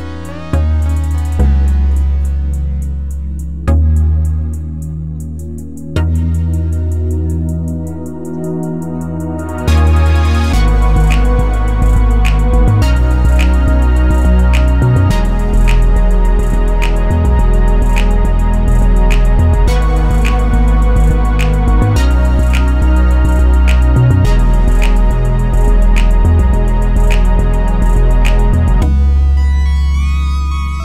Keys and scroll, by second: 5.6 2, 5.8 Return.